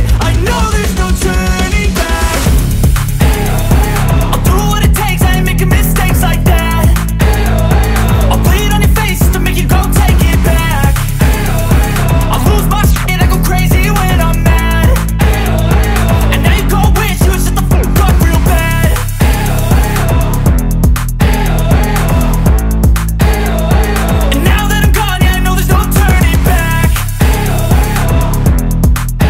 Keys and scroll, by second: 2.4 Return, 4.2 super+[, 20.4 g, 22.6 shift+super+z, 24.6 shift+v, 25.8 z, 27.0 shift+super+n, 27.7 shift+super+Return, 28.7 b.